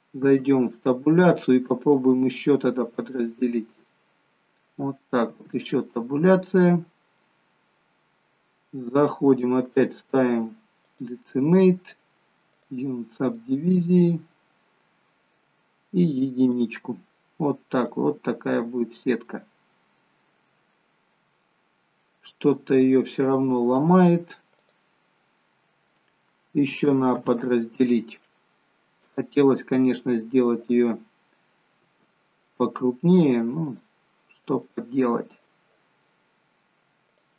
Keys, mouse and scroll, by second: 0.3 Tab, 1.8 click, 5.3 Tab, 7.2 middle click, 9.4 click, 13.4 click, 13.4 middle click, 17.4 click, 17.4-18.3 scroll up 2, 17.9 middle click, 19.5 scroll down 1, 20.1 middle click, 23.5-24.7 scroll down 2, 24.7 click, 25.3 middle click, 27.3 ctrl+z, 29.0 click, 31.8 Tab, 33.7 click, 37.2 click.